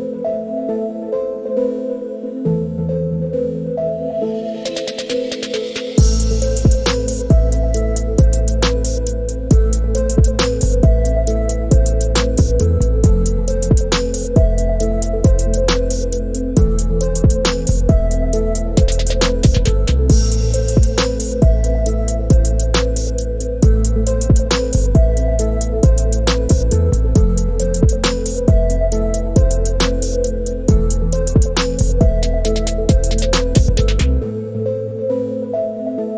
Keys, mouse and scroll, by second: 3.8-4.2 shift+middle drag, 5.3 click, 7.6 shift+drag, 15.3 click, 17.1 ctrl+z, 20.2 shift+middle click, 20.4 shift+click, 21.1 shift+middle click, 21.2 shift+drag, 22.2 shift+middle click, 22.2 shift+click, 22.3 shift+middle click, 23.3 shift+middle click, 26.2 click, 28.4-29.9 drag, 30.0 click.